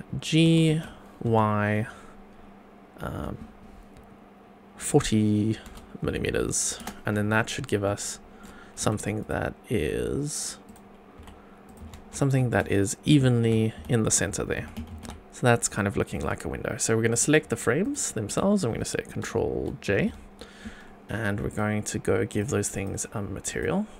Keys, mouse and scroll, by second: 0.4 g, 0.7 x, 1.2 y, 5.0 KP_4, 5.6 KP_0, 6.8 Return, 7.3 scroll up 2, 7.8-8.4 shift+middle drag, 8.8 q, 10.6 click, 11.1 q, 16.1 click, 17.1 click, 17.8 shift+click, 19.9 ctrl+j, 21.5 click, 22.3 click, 22.7 click, 23.5 click.